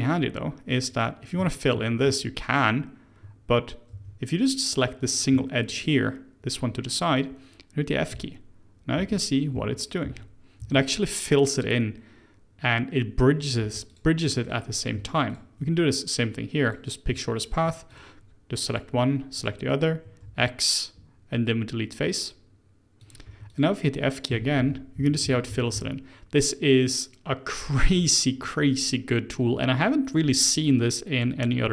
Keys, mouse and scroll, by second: 0.9 click, 1.4 alt+click, 2.0 f, 3.9 ctrl+z, 4.7 click, 5.1 scroll up 2, 5.4 shift+middle click, 5.9-8.1 scroll down 1, 8.1-10.6 typing, 13.6 3, 13.9 click, 14.2 middle click, 14.7 click, 15.3 ctrl+shift+click, 16.6 click, 17.9 ctrl+click, 18.6 click, 19.3 ctrl+click, 20.2 x, 23.2 2, 23.4 click, 24.3-25.7 typing.